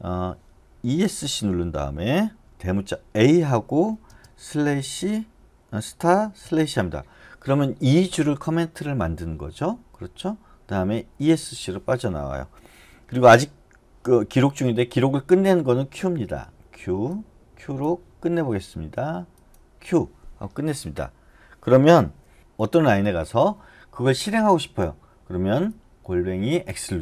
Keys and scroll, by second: 0.9 Escape, 3.2 shift+a, 4.1 space, 4.6 *, 6.4 /, 11.2 Escape, 19.8 q, 22.4 Escape.